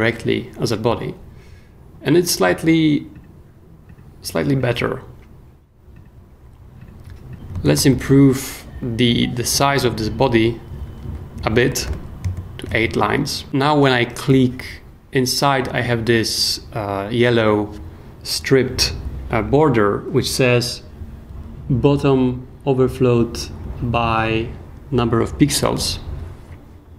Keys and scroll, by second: 7.5-8.4 typing, 11.5-12.3 typing, 12.7 super+s.